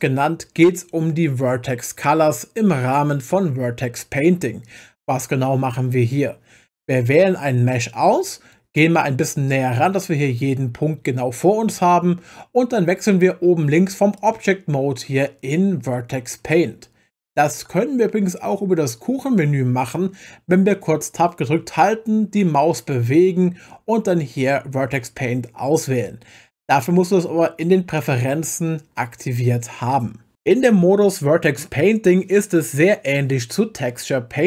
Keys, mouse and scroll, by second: 7.7 click, 14.2-17.3 drag, 21.6 Tab.